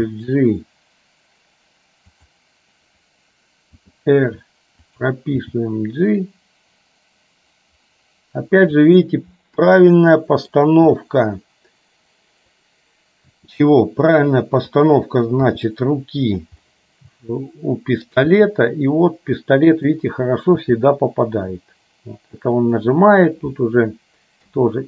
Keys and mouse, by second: 0.0 g, 3.9 r, 5.5 g, 9.9 middle click, 11.2-12.7 middle drag, 13.3 r, 15.7 g, 16.8-18.2 middle drag, 18.3 g.